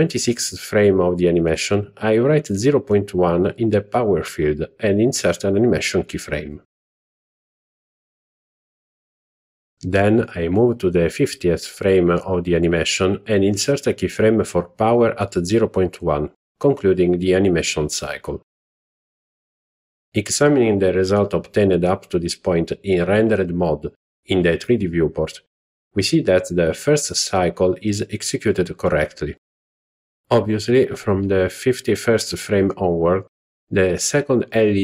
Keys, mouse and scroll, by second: 1.2-2.6 drag, 4.5 right click, 8.9-10.5 drag, 13.3 right click, 16.2 click, 16.7 z, 18.9-20.9 Right, 21.3-23.1 Left, 23.4-25.0 Right, 25.7 Left, 26.2-27.4 Left, 27.6 Left, 27.7 Left, 27.8-31.9 Right, 32.7-34.8 Left.